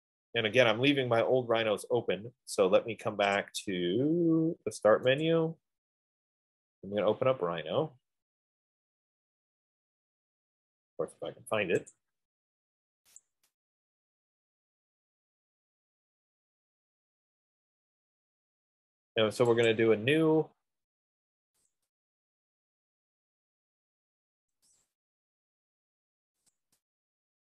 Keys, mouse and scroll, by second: 0.2-2.2 drag, 5.5 click, 7.0-8.6 scroll, 8.6-10.2 scroll, 10.2 scroll, 12.2 click, 13.6 click, 20.0 click, 22.0 click, 25.1 click, 26.8 click.